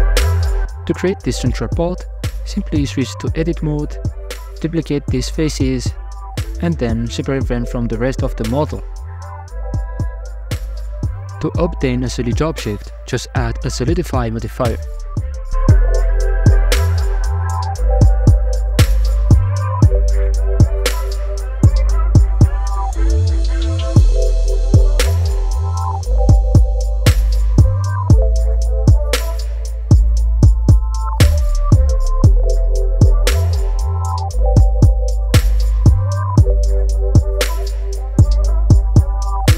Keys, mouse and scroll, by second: 0.7 alt+z, 1.5 ctrl+r, 1.9 g, 2.7 g, 3.4 Tab, 3.8 scroll down 1, 4.0 middle click, 4.2 scroll up 3, 4.5 Tab, 5.1 alt+right click, 8.1 shift+d, 9.4 p, 10.2 Tab, 10.5 right click, 11.5-12.6 drag, 13.6-16.4 shift+drag, 16.4 middle click, 16.8 click, 17.6-18.6 middle drag, 18.6-19.0 scroll up 3, 19.0-20.0 middle drag, 20.0 w, 20.8-22.2 middle drag, 22.2 scroll down 1, 22.3 middle click, 22.7 scroll up 3, 23.6-24.0 middle drag, 24.0 right click, 24.7 KP_Divide, 25.3 scroll down 1, 25.4 middle click, 25.6 scroll up 3, 25.9 Tab, 26.2 scroll down 1, 26.4 alt+right click, 26.7 g, 28.4 Tab, 28.8 alt+right click, 30.1 alt+e, 34.6 middle click, 34.8 Tab, 35.2 middle click, 35.5 w, 37.2 KP_Divide, 37.3-38.0 middle drag, 38.0 scroll down 1, 38.2-39.5 middle drag.